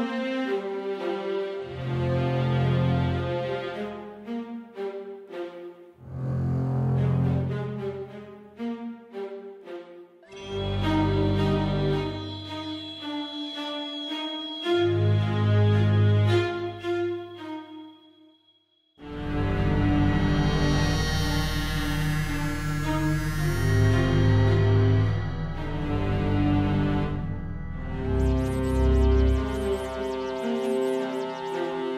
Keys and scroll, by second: 6.3 Down, 6.4 Down, 6.5 Left, 6.6 Left, 8.5 Down, 8.6 Down, 9.1 Down, 9.5 Down, 13.3 Page_Up, 13.4 Page_Up, 13.4 Page_Up, 13.5 Page_Up, 20.8 Left, 23.8 Up, 24.0 Page_Down, 27.4 scroll down 1, 31.8 super+z.